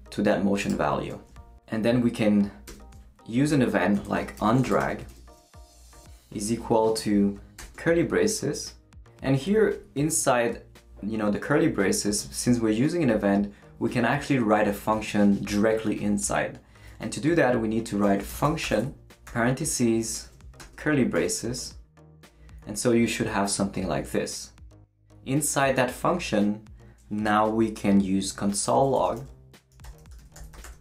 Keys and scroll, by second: 2.7 Return, 4.0-5.9 typing, 7.6 shift+[, 18.0-20.6 typing, 20.0 shift+Right, 21.1 shift+Return, 21.8 Return, 28.7-30.8 typing.